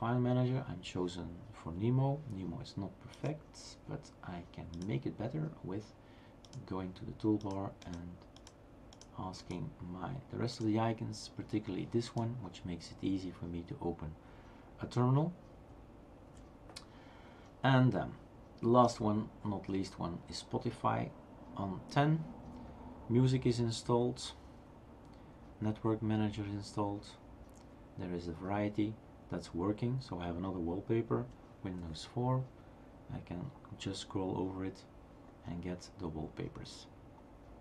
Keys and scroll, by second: 16.4 shift+super+q, 31.8 super+'.